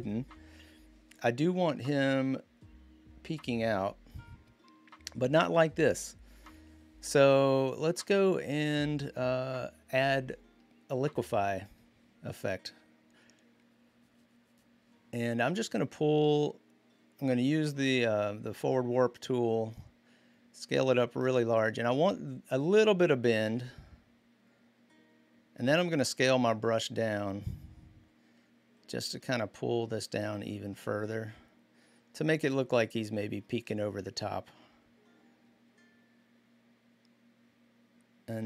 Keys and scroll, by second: 19.3-19.7 typing, 26.5-26.9 typing.